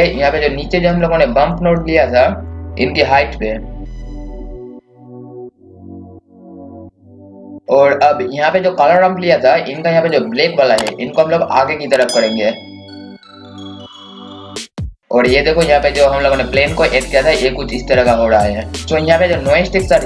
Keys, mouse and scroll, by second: 1.5 click, 2.5 scroll up 1, 3.8 scroll down 1, 4.2 click, 4.4-5.2 scroll down 1, 5.2 click, 7.6 scroll up 1, 9.8 scroll down 1, 11.2-18.7 drag, 18.9 scroll up 1, 19.4-20.0 scroll down 1.